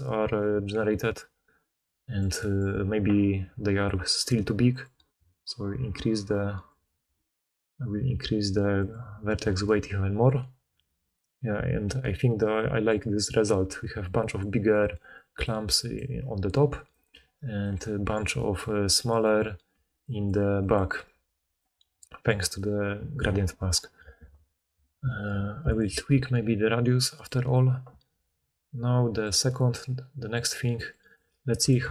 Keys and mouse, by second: 0.3 d, 0.4 d, 1.1-1.5 middle drag, 7.0-11.6 middle drag, 13.5 d, 13.9 d, 14.6-17.6 drag, 14.9 d, 15.0 d, 16.8 d, 17.0 d, 17.6 d, 19.6-20.9 d, 21.5 d, 25.7-27.3 drag, 31.1-31.9 drag.